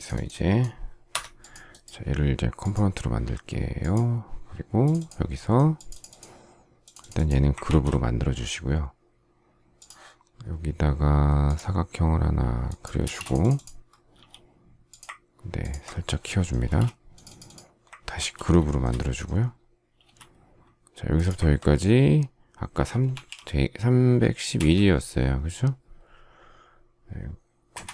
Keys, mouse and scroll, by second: 1.0 Escape, 7.5 ctrl+g, 12.9 space, 14.0 s, 15.5 ctrl+click, 16.5 space, 18.0 ctrl+g, 18.5 shift+middle click, 19.9 m, 22.8-24.5 typing, 27.6 Return.